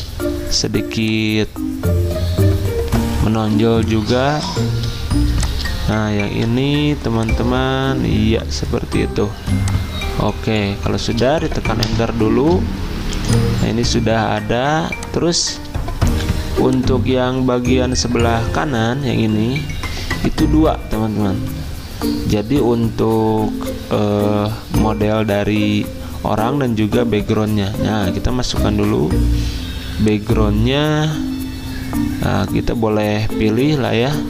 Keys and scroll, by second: 9.4 z, 11.8 Return, 13.0 z, 14.8 v, 27.1 alt+Tab.